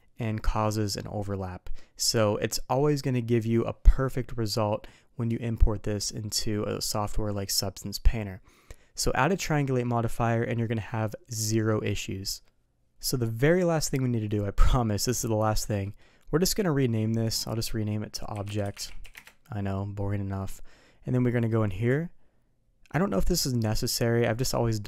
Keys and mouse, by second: 15.8 middle click, 17.2 click, 17.4-19.6 drag, 21.7 click, 24.0-24.5 middle drag.